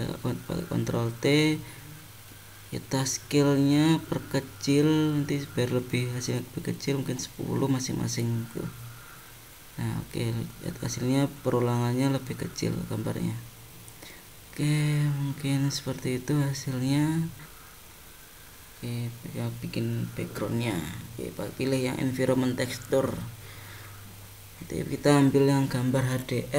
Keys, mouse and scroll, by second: 17.3 click, 17.5 click, 19.7 click, 24.0 click.